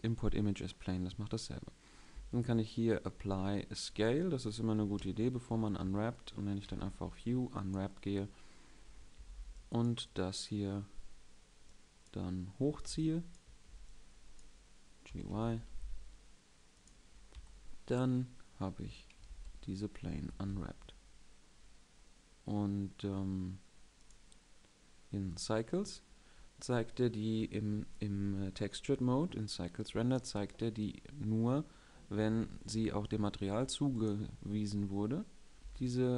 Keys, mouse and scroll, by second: 4.7 Tab, 5.1 a, 5.5 a, 6.3 u, 8.7 a, 8.9 b, 12.4 a, 12.6 b, 13.2 a, 13.4 b, 14.8 g, 17.0 Tab, 19.0 alt+z, 20.2 alt+y, 35.5 a.